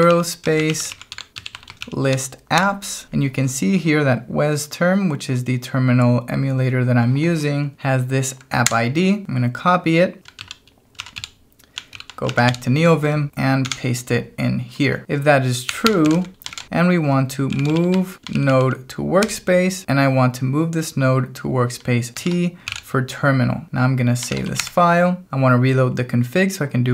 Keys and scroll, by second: 0.0-2.0 typing, 2.6 Return, 8.6 y, 10.4 ctrl+c, 10.9 ctrl+a, 11.1 m, 11.9 ctrl+k, 12.3 ctrl+a, 12.5 m, 13.6 p, 15.0-18.3 typing, 18.3 ctrl+j, 19.3 space, 22.1 shift+t, 22.6 k, 24.0-24.9 typing.